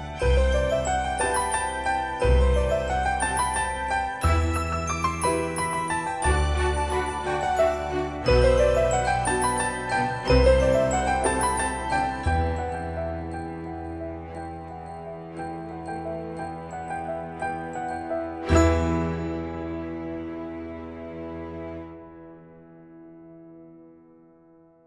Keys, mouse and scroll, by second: 2.1 typing, 3.1 Return, 7.8 click, 8.4 scroll up 1, 10.6 typing, 12.8 click, 15.8 typing, 18.6 click, 19.9-20.3 scroll up 1, 20.5 middle click, 21.6-22.3 scroll down 1, 22.3-22.9 scroll up 1, 23.7 click.